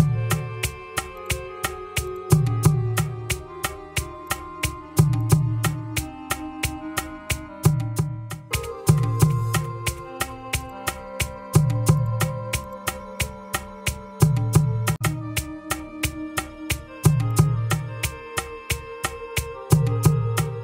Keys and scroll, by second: 3.0 ctrl+c, 6.2 ctrl+v, 7.2 Return.